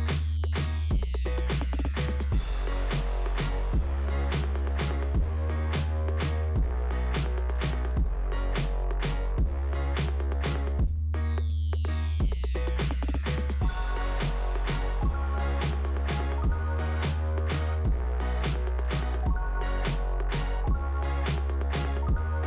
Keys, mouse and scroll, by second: 0.9 scroll up 1, 1.4 click, 3.4 click, 4.4 scroll down 2, 6.4 scroll down 3, 7.8 scroll down 1, 9.6 click, 10.3-10.9 scroll down 3, 13.4 scroll up 1, 14.7 scroll up 1, 14.8 click, 15.3 click, 15.4 double click, 17.9 click, 18.8 scroll up 1, 19.5 f, 20.6 scroll up 2.